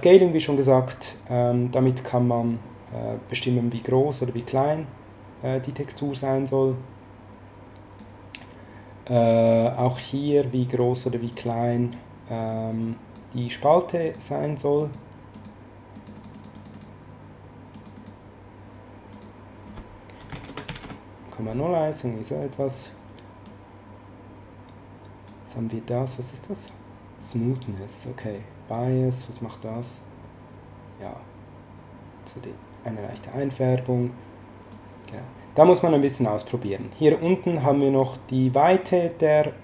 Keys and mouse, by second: 1.1 click, 9.9 click, 12.4 click, 14.0 click, 19.1 click, 20.2 KP_0, 20.3 KP_Decimal, 20.4 KP_0, 20.6 KP_1, 20.8 Return, 20.8 KP_Enter, 23.4 click, 28.7 click, 34.7 click, 37.9 click.